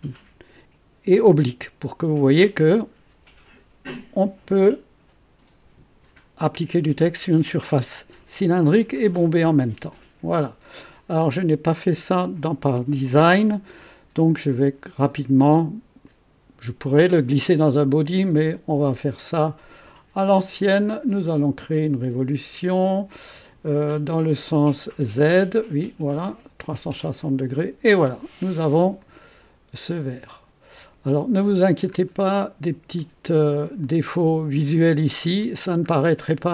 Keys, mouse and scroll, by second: 10.6 click, 14.5 click, 16.0 click, 21.1 click, 26.9 click, 29.0-31.6 drag, 31.8-33.0 scroll up 2, 33.0-34.5 drag, 33.8 right click, 35.5 scroll down 2, 36.2 right click, 36.2 click.